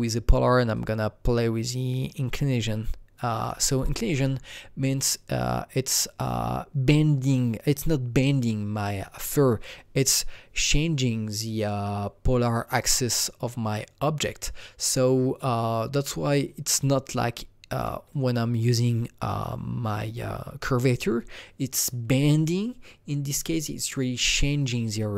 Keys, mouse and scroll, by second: 0.7-9.8 drag, 0.7 scroll down 1, 18.1-21.9 alt+drag, 23.9-25.1 alt+drag.